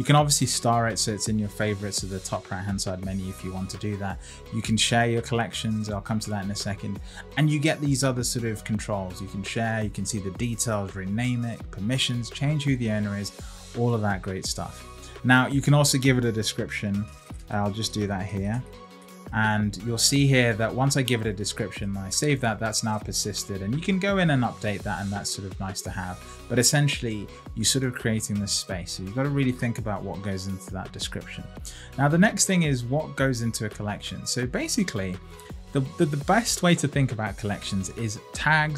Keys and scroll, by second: 16.5 shift+g.